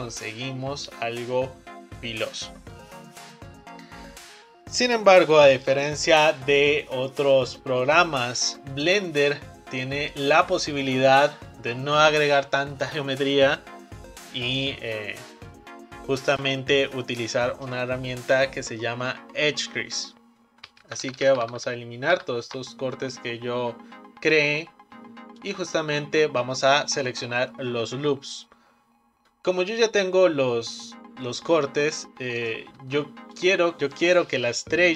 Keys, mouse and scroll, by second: 20.9 ctrl+z, 21.1-21.5 ctrl+z, 21.7 ctrl+z, 22.2 ctrl+z, 25.4 alt+click, 32.4 click, 33.4 shift+click.